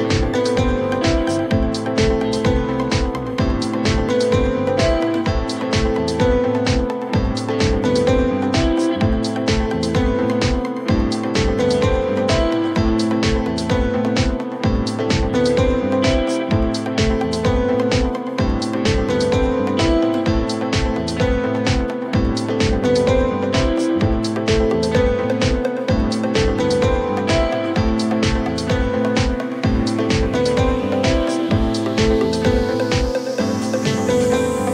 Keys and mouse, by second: 9.1-12.0 drag, 13.7 click, 33.0-33.7 alt+drag, 34.4-34.7 alt+drag.